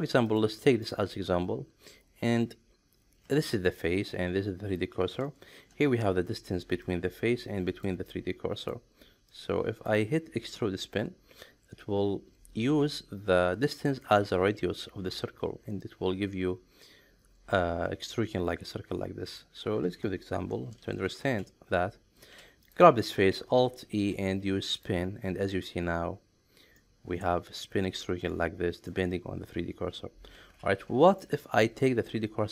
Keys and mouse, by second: 0.8-2.3 middle drag, 3.4 shift+middle click, 5.5 ctrl+shift+3, 22.6 click, 23.6 alt+e, 26.8-28.9 middle drag, 30.3 ctrl+z, 31.2 shift+middle click.